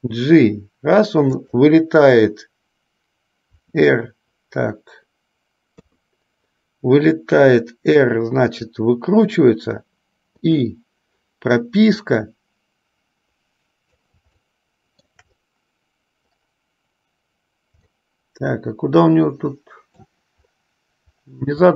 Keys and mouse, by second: 3.6 KP_4, 10.5 i, 12.3-14.3 drag, 14.6-15.4 shift+middle drag, 18.0-20.4 middle drag.